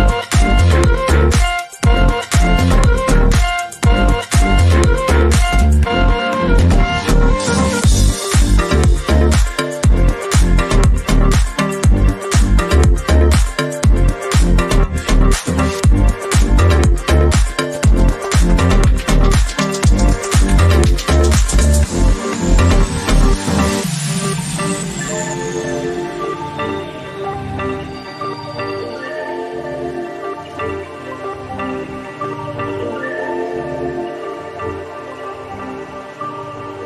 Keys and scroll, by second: 4.8 Down, 5.1 Right, 5.5 Left, 6.0 Up, 20.4 Left, 21.0 Left, 22.3 Left, 28.7 Up, 29.2-36.8 Up.